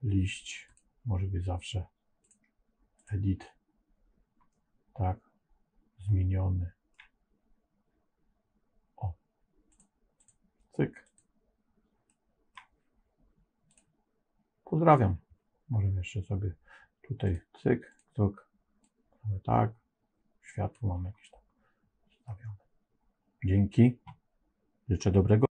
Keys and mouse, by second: 0.5 click, 2.3 click, 4.4-6.8 middle drag, 9.6 click, 11.0 click, 12.0 middle click, 13.6 click, 17.2 click, 21.1-22.2 middle drag.